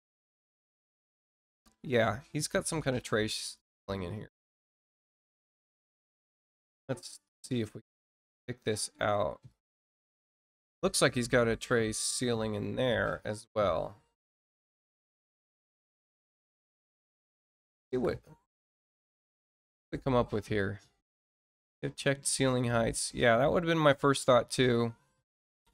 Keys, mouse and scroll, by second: 2.6 click, 4.9 click, 6.5-7.6 scroll up 2, 7.6 middle click, 9.4 click, 10.1-10.5 scroll up 4, 14.3 click, 19.5-21.1 alt+scroll down 8, 21.5 alt+scroll down 2, 22.1 alt+scroll up 2, 22.5 alt+scroll down 2, 23.0 scroll down 2, 24.4 scroll down 2.